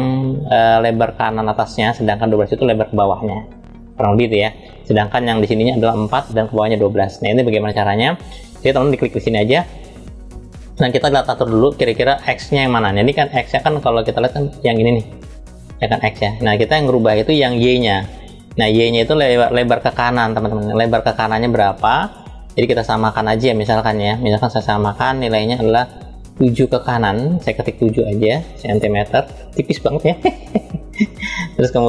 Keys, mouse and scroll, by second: 7.3 click, 8.1 drag, 8.5 click, 10.5-10.8 scroll down 2, 11.2-13.6 middle drag, 19.1-20.1 middle drag, 20.2-20.5 scroll up 1, 21.8-26.2 drag, 27.1-28.5 drag.